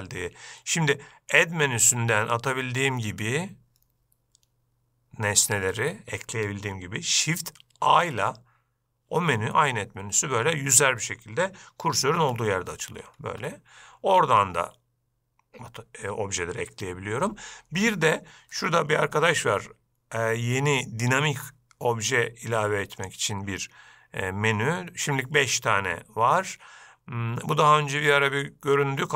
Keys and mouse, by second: 1.5-5.8 drag, 8.0 shift+a, 12.2 shift+a, 13.4 shift+a, 23.3-29.1 drag.